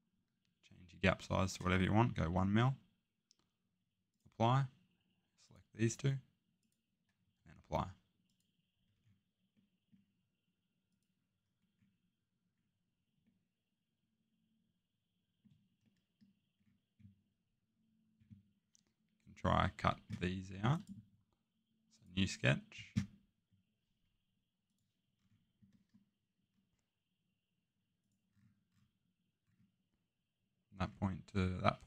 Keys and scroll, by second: 2.2 1, 7.3 typing, 20.2 Escape.